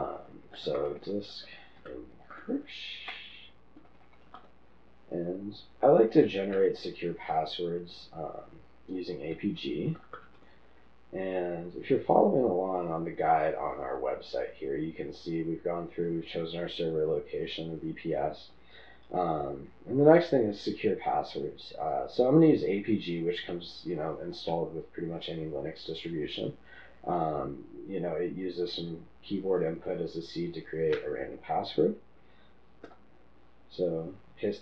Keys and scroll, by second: 1.5-4.6 typing, 7.6 typing, 10.6 Return, 10.6 typing, 12.1 typing, 33.1 v.